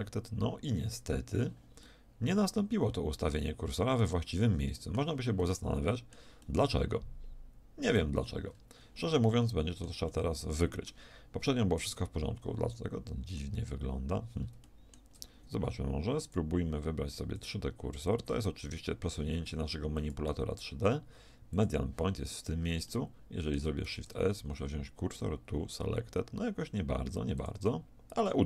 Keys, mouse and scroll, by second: 1.9-3.7 middle drag, 4.5-7.3 middle drag, 8.2 middle click, 12.5 middle click, 14.1-16.3 middle drag, 16.3-19.2 drag, 20.0-21.7 drag, 22.9 middle click, 23.7 click, 23.9 middle click, 23.9 shift+s.